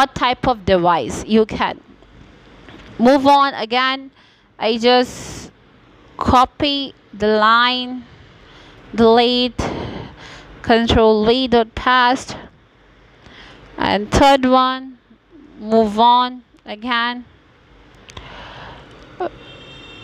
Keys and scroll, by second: 0.5 ctrl+v, 3.2 BackSpace, 3.7 3, 14.2 BackSpace, 14.8 Return, 16.4 ctrl+v, 19.8 BackSpace.